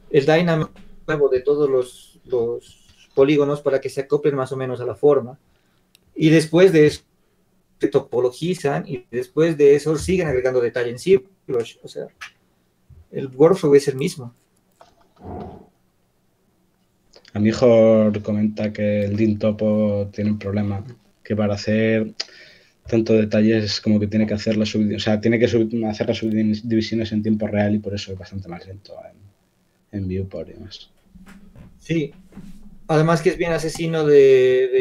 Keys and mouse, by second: 27.5-29.4 drag.